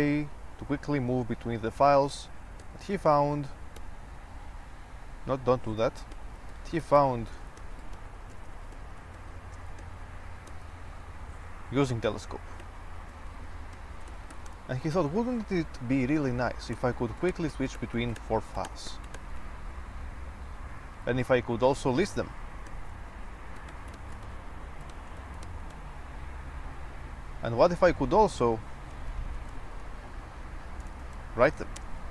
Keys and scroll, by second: 0.5 typing, 2.8 typing, 3.8 typing, 5.2 Escape, 6.1-11.2 typing, 12.6-15.0 typing, 16.7-21.5 typing, 22.9-26.3 typing, 27.4-32.1 typing.